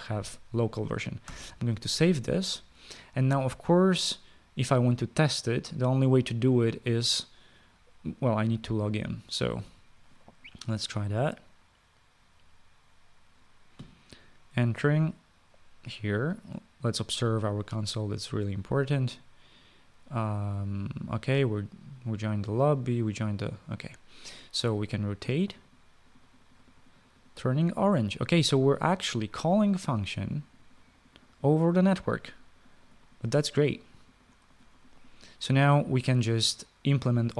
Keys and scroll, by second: 2.1 ctrl+s.